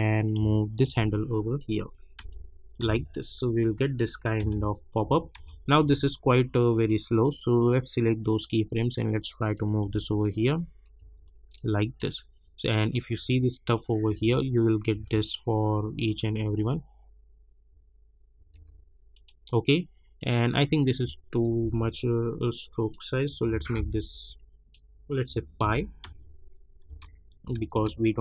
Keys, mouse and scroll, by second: 2.2 space, 6.7-9.5 drag, 9.8 space, 11.5 click, 13.1 space, 14.6 click, 14.9 space, 18.5 space, 19.1-21.6 drag, 21.6 j, 22.8 click, 25.6 Return, 26.0 space.